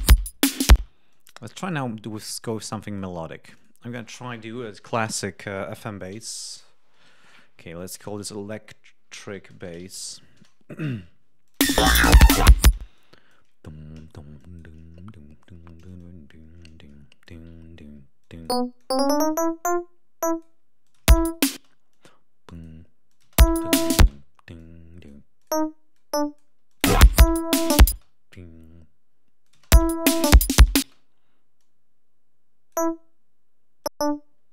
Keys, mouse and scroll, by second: 0.6 space, 1.0 click, 2.3 click, 3.3 click, 6.0-10.4 typing, 11.4 click, 11.6 space, 11.9 ctrl+scroll up 1, 12.7 space, 13.0 ctrl+click, 14.4 click, 15.0 scroll down 2, 15.6 d, 16.0-17.5 drag, 17.7 ctrl+scroll up 2, 18.2 ctrl+click, 18.8-20.6 drag, 20.8 click, 21.0 space, 23.2 space, 24.0 space, 25.4 click, 25.9 click, 26.7 click, 26.8 space, 27.9 space, 29.4 click, 29.6 space, 30.8 space, 31.6-32.9 drag, 33.8 click.